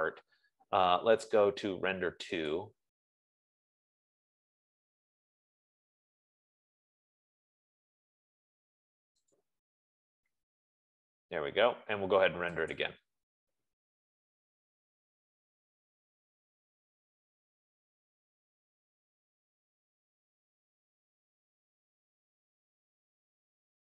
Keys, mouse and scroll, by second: 0.6 click, 3.1 click, 9.8 click, 13.4 click.